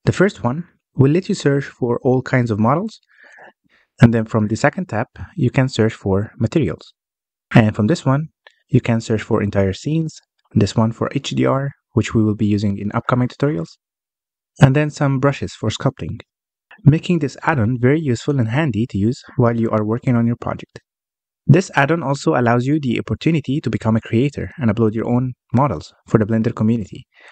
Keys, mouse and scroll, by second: 0.1 click, 2.7-5.6 drag, 9.1 click, 11.6 click, 15.1 click, 18.6-19.3 scroll up 1, 19.3 click, 20.3-21.6 scroll down 2, 21.6-23.9 scroll up 1, 23.9 n, 24.5 n, 25.6-27.3 drag.